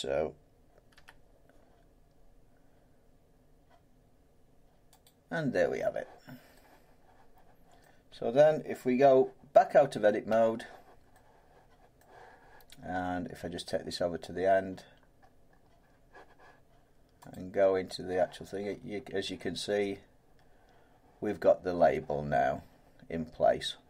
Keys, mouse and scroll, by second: 0.9 g, 5.0 click, 7.8 middle click, 10.3 Tab, 12.0 middle click, 13.0-14.8 scroll down 9, 14.2-14.8 scroll up 1, 14.8-15.2 scroll down 1, 15.2-15.5 scroll down 3, 17.3 click, 18.6 scroll down 1, 18.7 scroll up 1, 18.8-19.2 scroll down 1, 22.4 scroll, 22.4-23.2 scroll up 1.